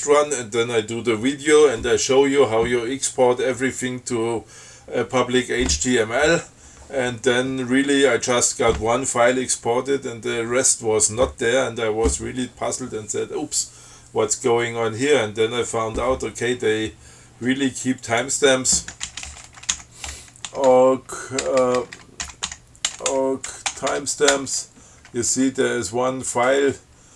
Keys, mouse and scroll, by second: 18.2 click, 19.0-24.5 typing, 21.0 Tab, 24.6 Return.